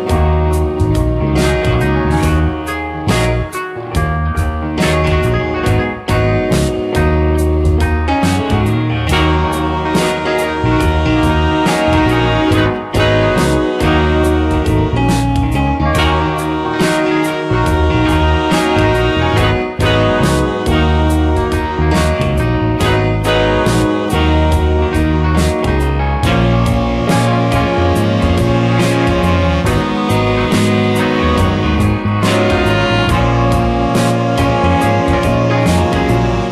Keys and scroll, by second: 3.4 space, 19.1 space, 28.3 ctrl+z, 33.1 space.